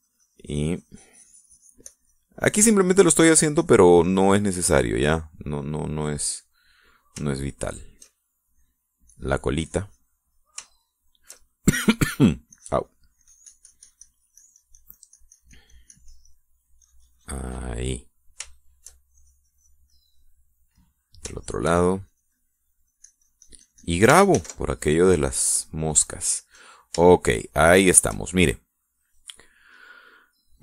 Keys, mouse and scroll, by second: 5.3 middle click, 8.0-9.4 shift+middle drag, 10.0-11.5 drag, 11.8 shift+middle click, 13.5-17.5 drag, 17.8-19.0 drag, 19.5 shift+middle click, 20.1 shift+click, 20.9 shift+middle click, 21.8 middle click, 23.0-25.0 shift+drag, 25.3 ctrl+s, 25.9 ctrl+click, 27.2 middle click, 28.1 shift+middle click, 28.7-29.9 shift+middle drag.